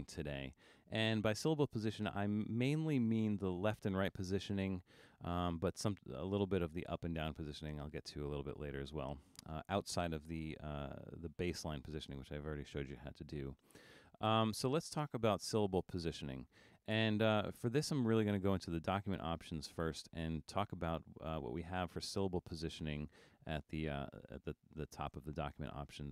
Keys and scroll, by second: 0.1 super+=.